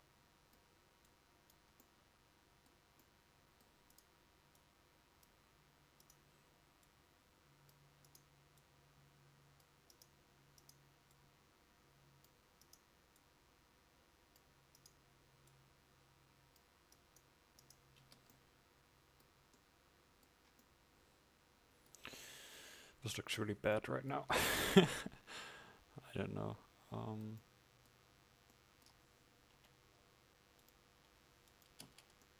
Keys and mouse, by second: 17.1 right click, 18.1 Tab, 20.8 Tab, 24.5 Tab.